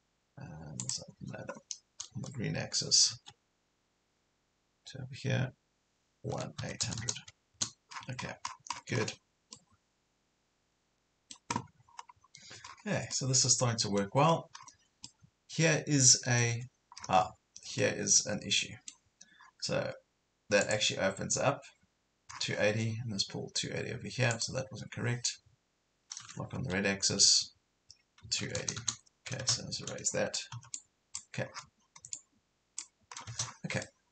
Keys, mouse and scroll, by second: 0.8 click, 3.1 Left, 6.3 KP_1, 6.6 KP_8, 7.9 scroll down 1, 8.8-9.2 scroll down 2, 9.5-11.9 middle drag, 11.9 scroll up 1, 12.7 scroll down 1, 13.1 middle click, 14.2 scroll up 1, 15.1-16.9 middle drag, 17.8-18.9 middle drag, 20.7 click, 22.3 scroll down 1, 22.5 Escape, 24.3 click, 26.5 Left, 27.1 Right, 28.3 KP_2, 28.5 KP_8, 28.6 KP_0, 29.9 shift+-, 30.5 e, 30.8 click, 31.5 scroll down 1, 32.1 click, 33.1 scroll down 1, 33.8 middle click.